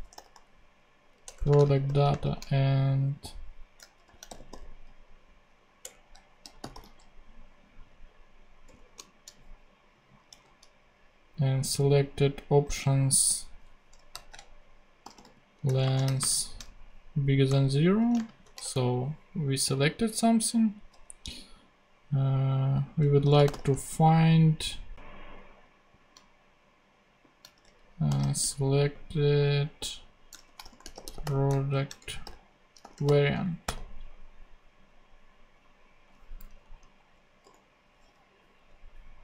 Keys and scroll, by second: 0.0-2.1 typing, 1.2 Return, 3.8-5.0 typing, 5.8 Return, 6.2-7.2 typing, 8.6 Return, 10.3 super+c, 13.2 super+Right, 13.8 Right, 14.1-16.0 typing, 15.6 Return, 17.4 shift+0, 17.8 super+Right, 18.1 shift+super+space, 18.4 shift+[, 18.6 shift+Return, 23.0-24.0 typing, 27.2-28.8 typing, 30.2-33.6 typing, 36.4 Down, 36.9 super+Right, 37.4 super+;, 38.2 ;.